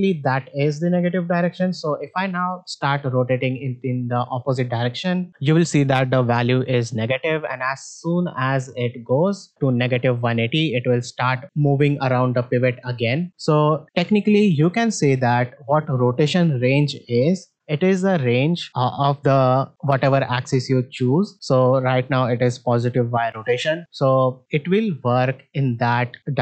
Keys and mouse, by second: 2.6 r, 19.9-21.3 drag.